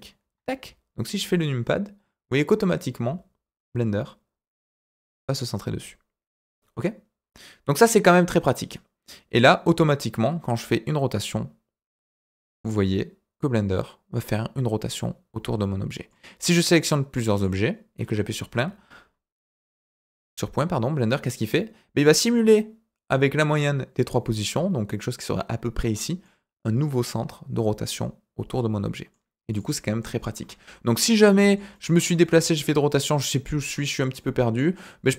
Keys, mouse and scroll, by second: 0.2 KP_Decimal, 3.8-4.6 scroll down 5, 5.1 scroll down 3, 7.7-16.0 middle drag, 16.7-17.4 drag, 18.5 KP_Decimal, 19.5-22.0 middle drag, 26.2-29.1 middle drag, 29.5 click, 30.3 KP_Decimal, 31.0 scroll down 3, 31.4 shift+middle click, 31.7 shift+middle click, 31.9 shift+middle click, 32.2 shift+middle click, 32.4-33.0 middle drag, 33.2 scroll down 1, 33.7 scroll up 2, 34.1-34.7 middle drag.